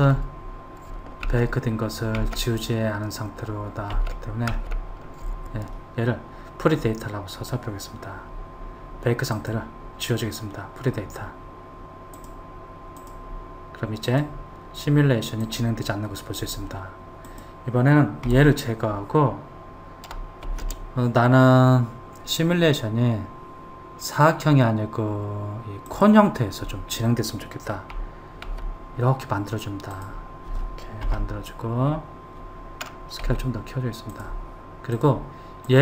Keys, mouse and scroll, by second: 0.2 ctrl+z, 1.5 ctrl+z, 2.5 ctrl+z, 4.2 ctrl+z, 4.8 ctrl+z, 9.6 click, 12.4 drag, 13.2 click, 14.3 click, 15.7 click, 17.5 click, 18.5 Delete, 20.7 shift+a, 28.7 s, 31.3 KP_1, 33.5 s, 35.1 click.